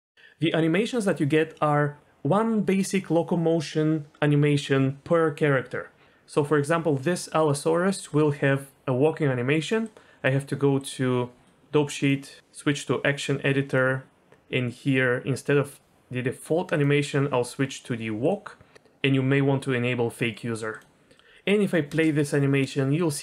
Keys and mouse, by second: 9.8 click, 12.1 click, 13.8 click, 21.9 space.